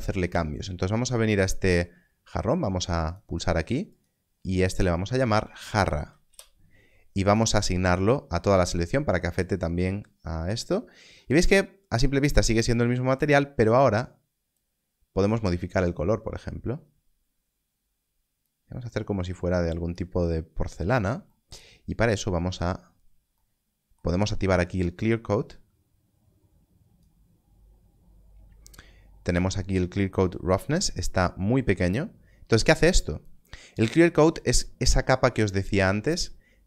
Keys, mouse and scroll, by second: 5.3 Left, 6.2 a, 6.2 Return, 7.2 click, 13.1 click, 24.8 click.